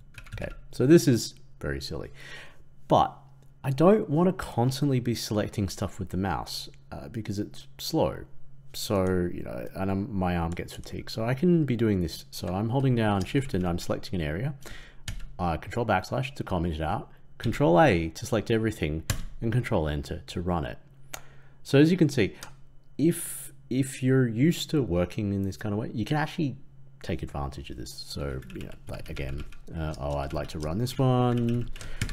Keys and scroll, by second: 15.0 ctrl+/, 17.3 ctrl+a, 19.0 ctrl+Return, 31.9 ctrl+/.